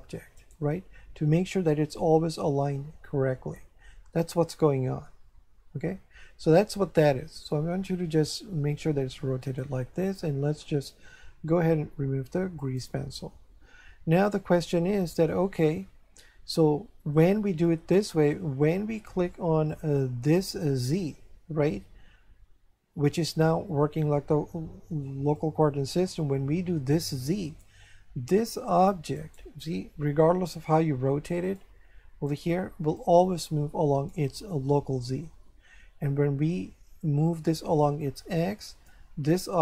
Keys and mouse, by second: 0.4 right click, 1.2 r, 9.4 click, 12.6 click, 14.6 shift+middle click, 19.7 click, 25.4 click, 29.2 right click, 30.5 r, 31.4 click, 32.3 right click, 33.0 click, 37.3 click.